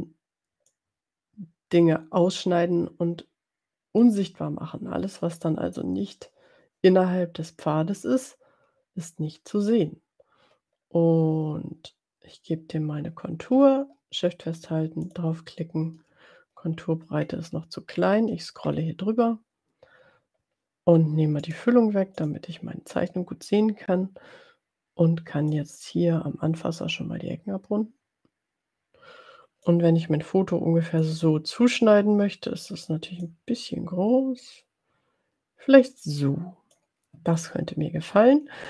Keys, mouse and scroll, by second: 0.6-4.4 drag, 15.1 shift+click, 17.2-17.8 scroll up 2, 17.9-18.4 scroll up 2, 18.9 scroll up 2, 19.2 scroll down 2, 21.4 right click, 22.2 click, 25.5-29.8 drag, 31.2 click, 33.4-37.0 drag.